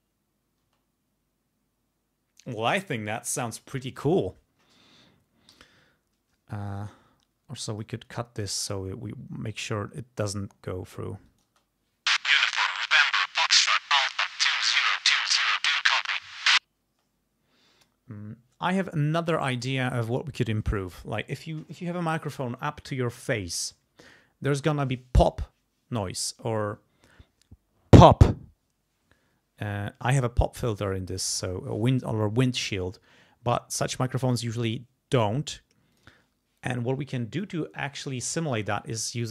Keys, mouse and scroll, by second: 0.6 space, 5.5 g, 6.9 alt+click, 11.3 click, 11.5 space, 16.8 space, 35.9 click.